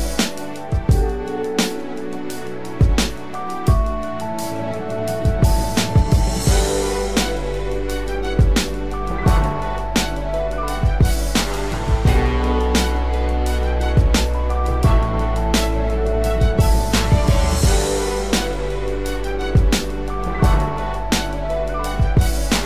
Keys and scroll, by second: 0.7 ctrl+-, 5.5 ctrl+=.